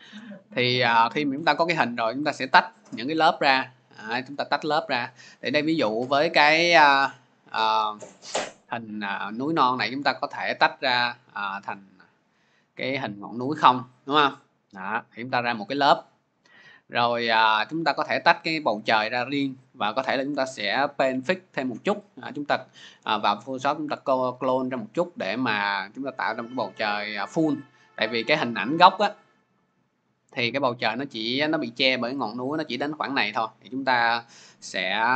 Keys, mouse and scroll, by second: 10.8 click, 11.6 click, 11.8 click, 13.5 click, 14.2 click, 14.8 click, 15.4 click, 17.8 click, 18.0 click, 28.0 click, 28.6 click, 29.3 click, 29.5 click, 34.2 click, 34.4 click.